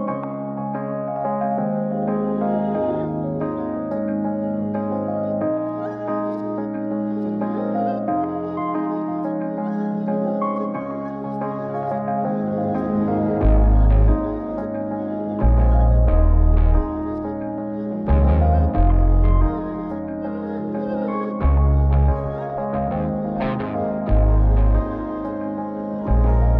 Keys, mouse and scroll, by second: 0.4 click, 1.2 click, 2.6 KP_0, 5.0 click, 6.2 KP_0, 9.1 click, 10.8 ctrl+KP_0, 12.9 click, 14.0 click, 16.5 ctrl+b, 20.3-23.4 drag, 25.0 click.